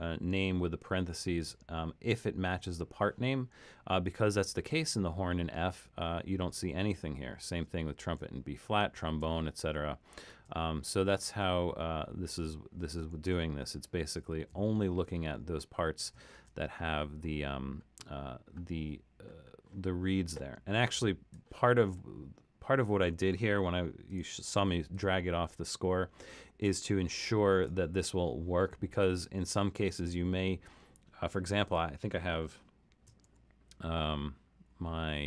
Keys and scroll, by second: 6.7 alt+super+., 8.0 alt+super+., 9.0 alt+super+., 10.3 alt+super+., 11.2 alt+super+., 13.1 alt+super+., 14.3 alt+super+., 16.3 alt+super+., 33.2 alt+super+., 34.7 alt+super+..